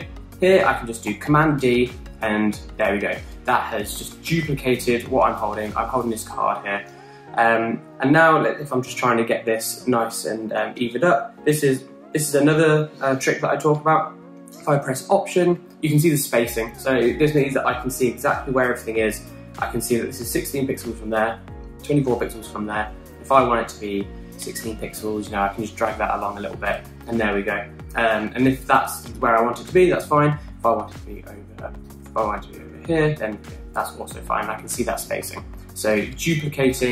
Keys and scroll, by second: 0.5 BackSpace, 1.8 super+d, 25.9 alt+Left, 26.1 alt+Left, 32.7 super+z.